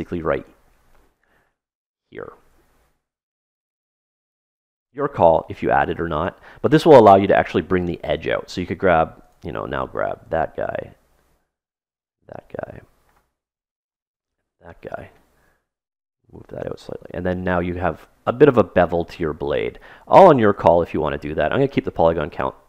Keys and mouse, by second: 2.4 ctrl+r, 8.5 right click, 10.1 middle click, 10.7 right click, 11.0 middle click, 11.9 right click, 13.0-14.9 middle drag, 13.6 right click, 14.9-16.0 drag, 16.1-18.4 drag, 17.7-18.9 middle drag, 19.4-21.4 middle drag, 20.3 ctrl+z, 20.5 ctrl+z, 21.0 ctrl+z, 21.5 ctrl+z, 22.4 ctrl+z.